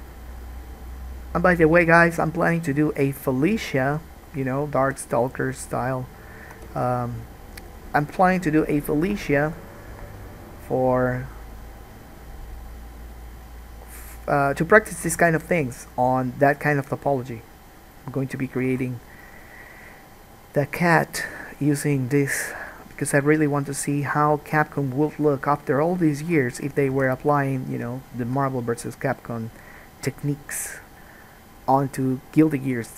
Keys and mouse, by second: 5.0 g, 6.4-7.7 drag, 6.9 ctrl+z, 7.7-13.9 middle drag, 15.4 alt+a, 18.9 alt+a, 23.1-27.5 middle drag, 27.2 ctrl+s.